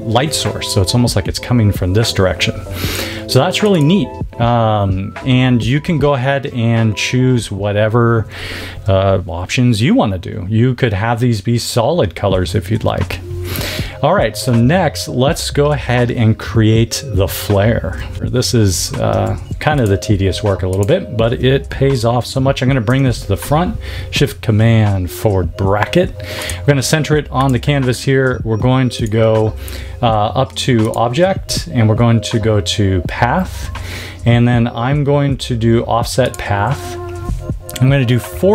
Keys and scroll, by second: 18.7 super+z, 22.8 shift+super+].